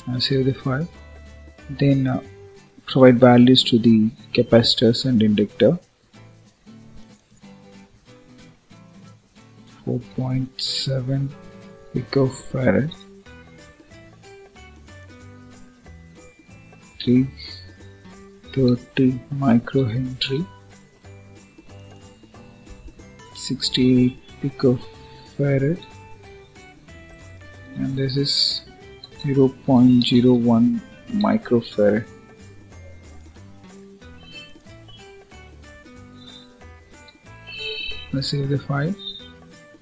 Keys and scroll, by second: 12.8 Return, 20.1 Return, 25.7 Return, 36.8 ctrl+s.